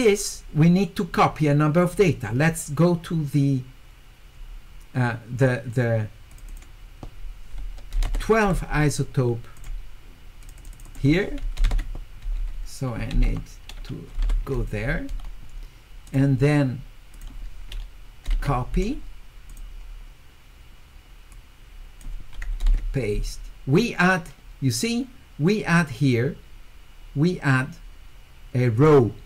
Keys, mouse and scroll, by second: 1.8 click, 6.3 click, 6.5 click, 9.6 click, 10.4 click, 10.6 click, 10.7 click, 10.8 click, 16.1 click, 17.1 click, 19.5 click, 21.3 click, 28.8 click.